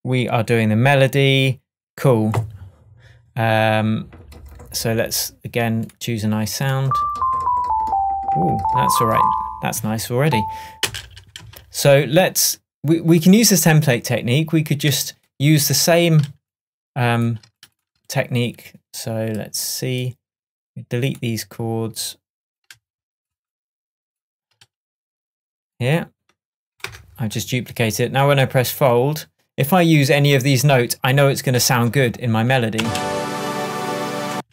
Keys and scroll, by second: 10.9 space, 26.9 BackSpace, 32.8 space, 34.4 space.